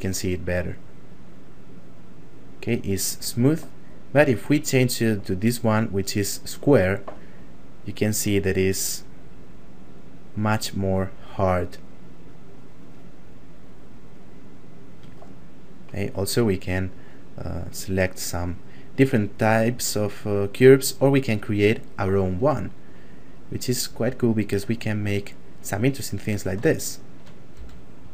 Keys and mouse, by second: 0.8 click, 8.3 f, 9.1 click, 16.9 click, 22.9 click, 25.6 click, 26.9 shift+middle click, 27.5 f, 28.0 click.